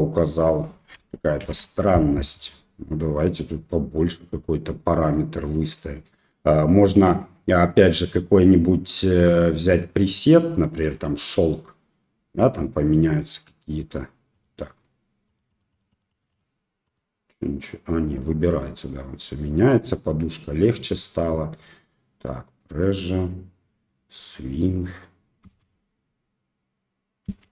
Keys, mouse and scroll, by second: 0.6 middle drag, 1.4 shift+Left, 2.4 click, 9.8-12.1 drag, 13.4-18.6 drag, 25.4 space, 27.3 space.